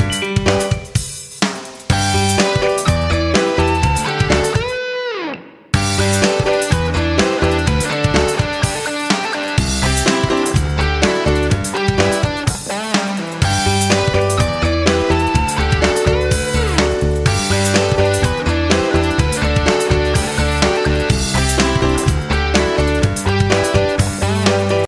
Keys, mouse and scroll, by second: 2.0 click, 7.1 F9.